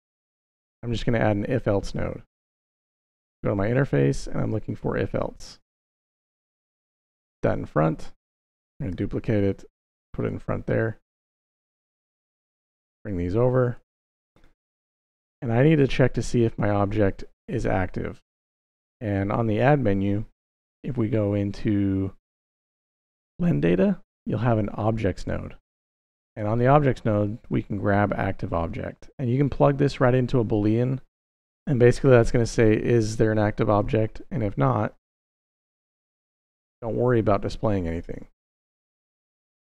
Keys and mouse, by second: 0.0 click, 2.4-7.1 drag, 8.3 shift+d, 8.7 y, 10.0 click, 11.3-11.9 drag, 12.7 g, 13.8 click, 14.6 middle click, 18.7 shift+a, 27.9-33.7 drag, 34.7 click, 34.8 middle click, 36.2 shift+d, 36.6 y, 37.8 click, 38.7-39.5 drag.